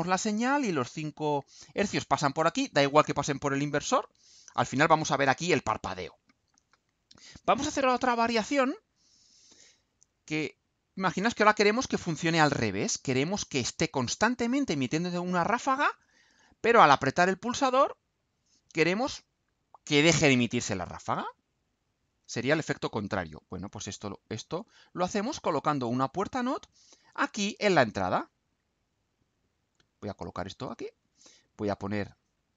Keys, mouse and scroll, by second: 8.8 click, 10.5 Delete, 18.3 click, 21.8-23.2 drag, 23.8-24.8 drag, 26.0 click, 27.0 click, 27.5-28.6 drag, 28.8-30.3 drag, 30.6-31.2 drag, 31.6-32.5 drag.